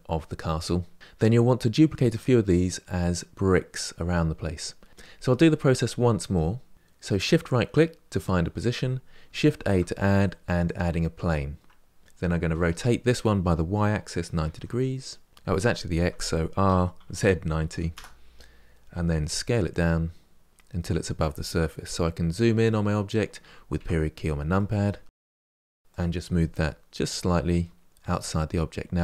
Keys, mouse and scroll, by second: 9.3 shift+a, 12.2 r, 16.5 r, 19.0 s, 20.5-23.2 middle drag, 23.6 KP_Decimal, 24.4-24.9 middle drag, 24.9 scroll down 1, 25.1-25.5 middle drag, 25.5 r, 26.3 g.